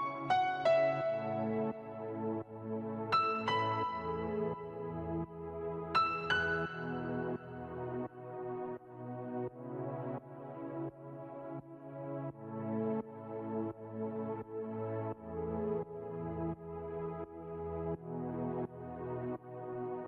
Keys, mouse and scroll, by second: 0.5-1.2 scroll, 1.2 click, 2.2 Right, 2.4 Right, 4.1 scroll, 4.5 click, 6.1 space, 6.7-7.1 scroll, 7.2 click, 8.7-9.3 scroll, 9.3 click, 11.6 ctrl+x, 12.7 ctrl+z, 14.6 right click, 15.0 click, 16.0 ctrl+x, 16.2 ctrl+z, 16.7 click, 18.4 click, 19.3 click.